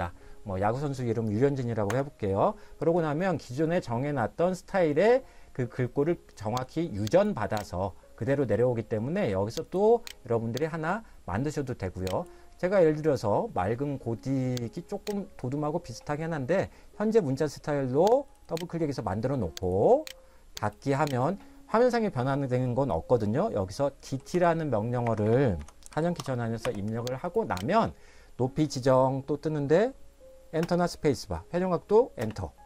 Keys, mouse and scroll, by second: 1.9 Return, 6.7 click, 9.8 click, 11.1 click, 14.8 click, 18.4 click, 23.8-24.8 typing, 25.0 Escape, 25.2 Escape, 25.9 d, 26.2 t, 26.6 space, 27.4 click, 30.6 Return, 32.2 Return.